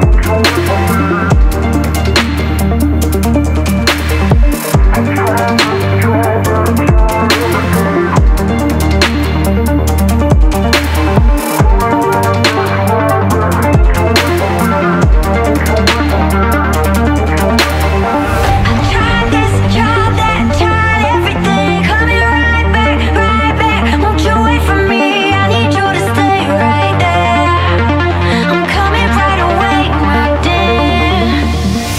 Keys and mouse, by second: 0.3 alt+click, 0.7 shift+drag, 1.6 ctrl+b, 8.7 e, 13.5 3, 14.6 alt+z, 14.9 click, 16.0 shift+click, 17.6 x, 19.8 alt+z, 20.1-20.9 drag, 22.1 ctrl+r, 23.4 click, 25.3 KP_1, 26.3 1, 26.8 alt+z, 27.3 click, 28.1 x, 31.0-31.9 drag.